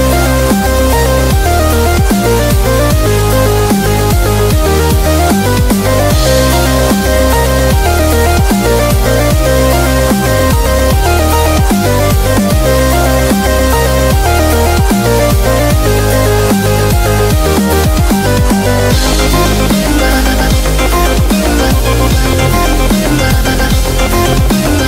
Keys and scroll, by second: 0.7 typing, 3.3 super+-, 10.1 super+=, 11.6 v, 15.7 super+z, 21.3-22.5 typing, 23.6-24.8 typing.